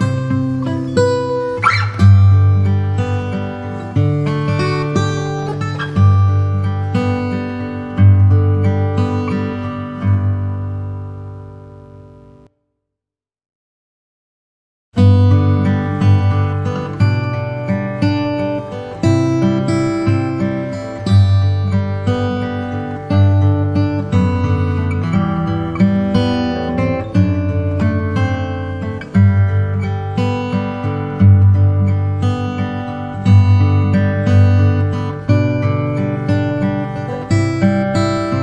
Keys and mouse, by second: 1.6 click, 4.6 shift+s, 10.2 KP_7, 12.2 click, 14.4-16.0 drag, 17.2 KP_1, 18.6 s, 24.5 s, 27.2 s, 31.3 g, 34.2 s, 35.9 g.